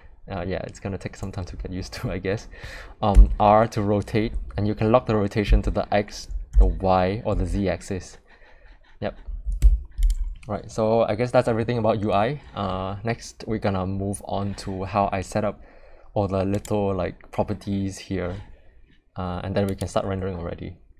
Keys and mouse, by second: 3.1 r, 9.6 Escape, 16.5 click.